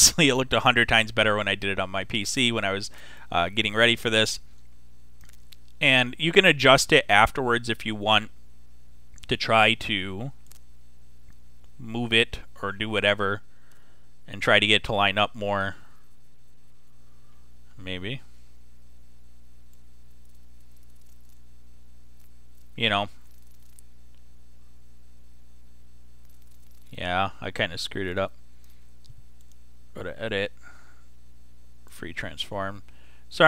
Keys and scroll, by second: 13.5 Down, 14.6 Right, 16.2 Right.